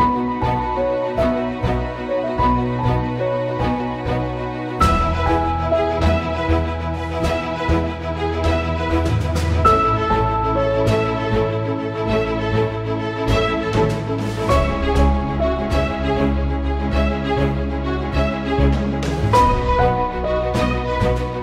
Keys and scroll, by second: 11.8 ctrl+x, 15.9 ctrl+shift+].